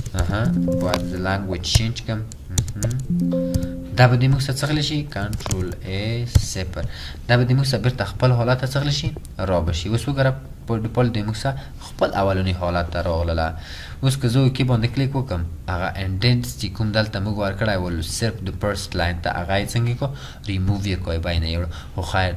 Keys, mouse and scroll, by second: 0.0 BackSpace, 0.2 BackSpace, 2.8 BackSpace, 3.6 0, 3.8 BackSpace, 3.8 0, 5.5 BackSpace, 5.6 ctrl+a, 6.4 0, 13.9-14.7 typing.